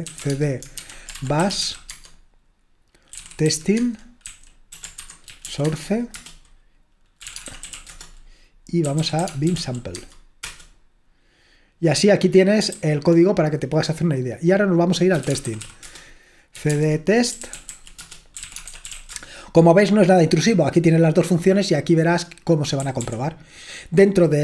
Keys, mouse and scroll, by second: 0.0-10.4 typing, 3.8 Tab, 6.1 Return, 12.8 super+h, 14.9-19.4 typing, 22.7-23.5 typing.